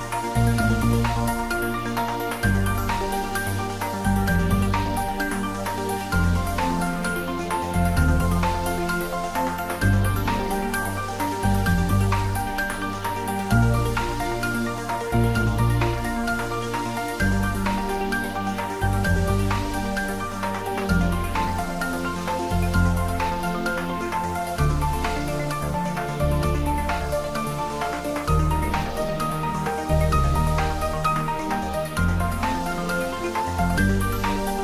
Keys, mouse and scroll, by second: 0.3 click, 2.0 Tab, 4.2-4.8 scroll up 1, 4.8-5.1 scroll down 1, 5.1 middle click, 6.3 Tab, 8.1-8.6 scroll down 1, 8.6-10.3 middle drag, 10.3-11.4 scroll up 1, 11.4 Tab, 13.3 Tab, 14.1-14.6 scroll up 1, 15.3 click, 16.4 right click, 17.0 click, 17.2 Tab, 17.8 right click, 18.3 click, 20.2-20.6 scroll down 1, 20.6-22.1 middle drag, 22.1-22.7 scroll down 1, 22.7 middle click, 24.0 alt+h, 24.6-25.1 scroll down 1, 26.5 shift+z, 29.0 g, 29.9 click, 30.4 ctrl+z, 31.1 click, 33.7 g.